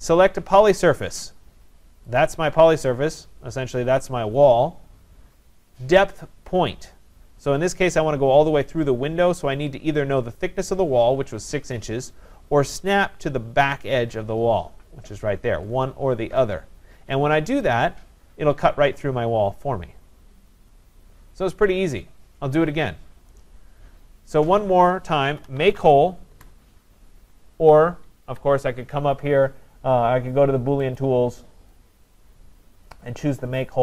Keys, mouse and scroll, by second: 2.2 click, 17.7 click, 18.6 scroll, 19.2 scroll, 22.4-22.8 scroll, 23.0 scroll, 25.2-26.3 typing, 27.9-28.6 typing, 31.0 click, 31.5 click.